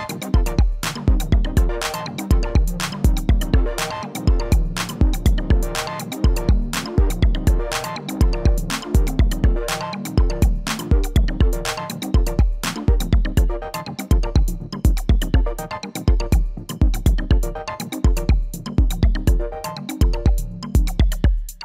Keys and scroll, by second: 5.1-5.9 typing, 6.2 Return, 9.1 ctrl+a.